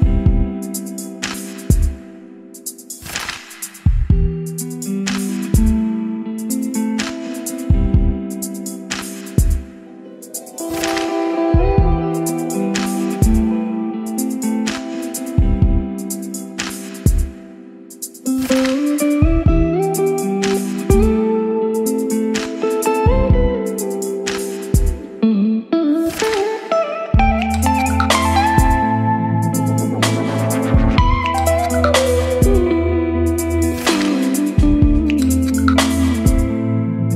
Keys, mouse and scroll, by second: 2.8 click, 3.5 middle click, 4.3 click, 5.0 Return, 7.8 shift+3, 8.6-9.8 middle drag, 9.8-11.8 drag, 11.8-13.5 typing, 13.9 Return, 14.8-16.4 typing, 18.4 Return, 18.8-20.3 typing, 20.9 Return, 22.1 shift+q, 22.3 t, 22.5 >, 23.6 Return, 23.8-27.4 typing, 28.9 Return, 30.1-32.4 typing, 33.4 Return, 35.9 Right, 37.0 Right.